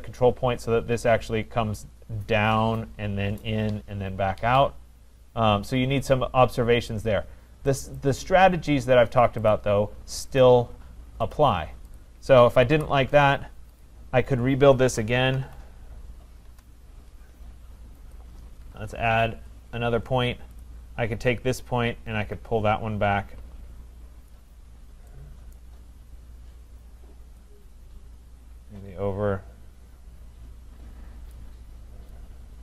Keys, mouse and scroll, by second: 7.8 click, 8.0 click, 9.5 click, 10.4 click, 11.3 click, 12.0 click, 12.7 Delete, 13.8 click, 15.3 typing, 16.5 Return, 18.1 click, 18.6-19.3 typing, 19.4 Return, 20.6 click, 24.3 click, 24.7-25.6 scroll, 25.6 right click, 26.1-27.6 scroll, 31.3 click.